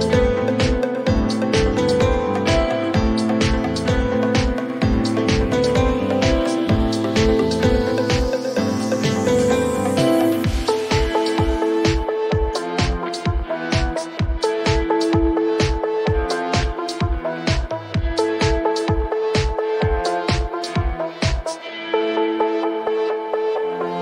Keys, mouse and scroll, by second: 0.7 click, 6.5-11.9 drag.